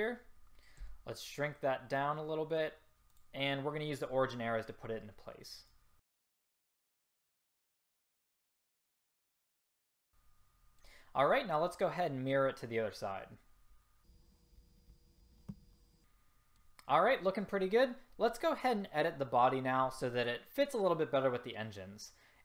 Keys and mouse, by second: 0.9 s, 5.8-6.3 drag, 6.3-6.6 middle drag, 6.8 click, 7.5 click, 8.1-8.9 middle drag, 9.6 click, 14.1 click, 14.8 click, 15.5 a.